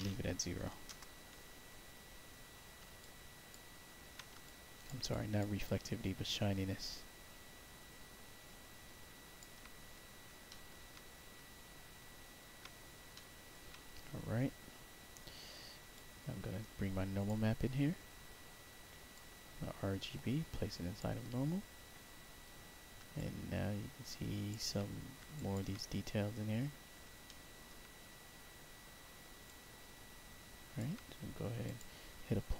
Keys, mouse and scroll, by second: 0.5 0, 0.8 Return, 2.9 alt+click, 4.4 alt+click, 5.0 alt+click, 5.6-9.3 alt+drag, 9.9 scroll down 1, 10.4 alt+middle click, 11.1 scroll down 1, 12.1-12.5 alt+scroll down 1, 13.0 alt+middle click, 15.9-17.2 drag, 19.0-20.9 drag, 23.1-24.4 alt+drag, 25.3 alt+click, 26.6 middle click, 27.2 alt+middle click, 27.8 scroll down 4, 28.2 scroll up 2, 28.6-29.1 scroll down 2, 29.4-30.7 alt+drag, 31.6 click.